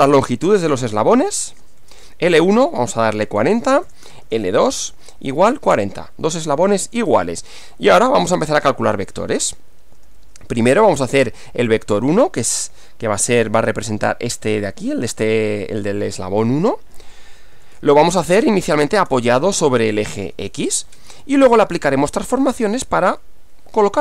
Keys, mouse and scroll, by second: 0.8-5.6 typing, 3.4 Return, 5.8 Return, 7.6 Return, 8.6-10.9 typing, 17.3-22.4 typing.